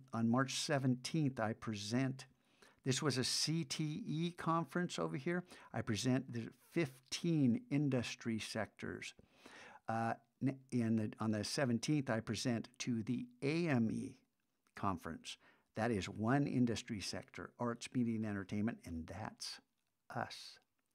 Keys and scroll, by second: 4.1 super+Tab.